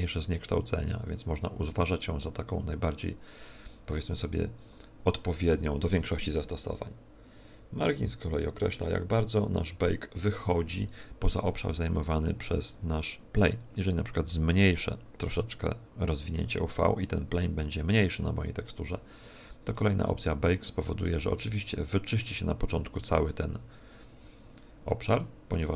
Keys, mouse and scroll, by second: 14.1 s, 15.5 click, 19.9 click.